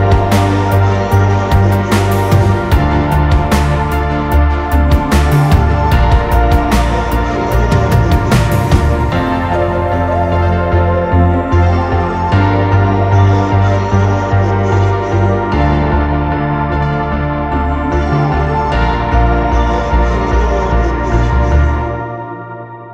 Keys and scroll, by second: 3.1-4.2 typing, 18.2 Return, 18.7 ctrl+shift+[.